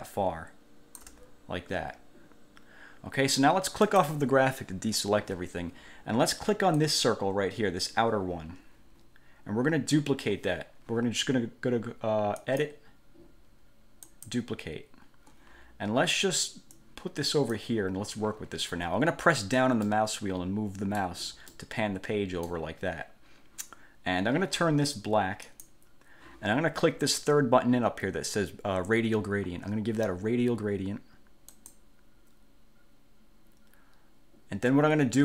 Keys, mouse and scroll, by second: 4.0 click, 7.0 click, 12.6 click, 14.2 click, 16.9 click, 20.0-21.4 middle drag, 21.7-22.8 middle drag, 25.6 click, 31.7 click.